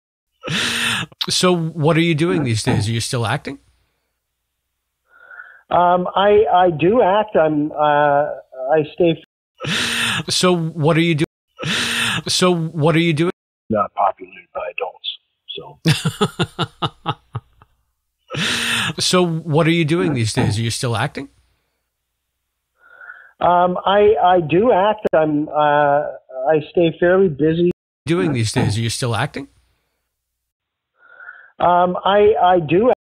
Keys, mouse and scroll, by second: 0.0 click, 0.1 space, 3.0 click, 3.8-6.3 drag, 6.6 click, 7.5-8.9 drag, 9.1 space, 9.3 click, 9.4 space, 11.1 space, 11.3 click, 13.2 space, 13.5 click, 13.6 space, 14.4 ctrl+s, 19.8 click, 20.9 click, 21.7 click, 23.2-24.6 drag, 25.0 Delete, 26.7 click, 27.6 space, 27.9 click, 28.0 space, 29.0 click, 31.0 click, 32.2 click, 32.8 space.